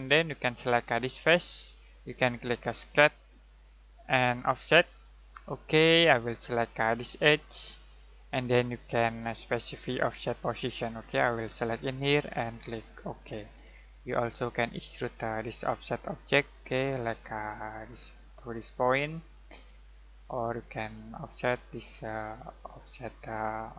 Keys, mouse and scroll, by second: 2.0 click, 7.4 click, 13.9 shift+middle click, 14.9 middle click, 17.0 click.